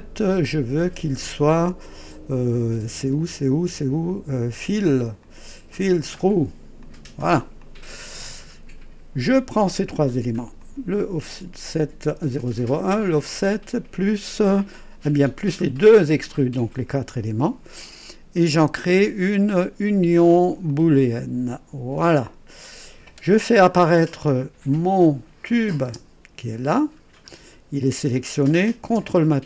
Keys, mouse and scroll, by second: 2.7-3.1 scroll up 1, 4.8 click, 6.0 click, 6.8 click, 7.6-9.4 drag, 10.6 click, 12.9 ctrl+click, 15.4 ctrl+click, 16.3 ctrl+click, 20.7 click, 24.1-24.5 scroll up 1, 25.5 click, 26.0 space, 26.8-27.1 scroll down 2.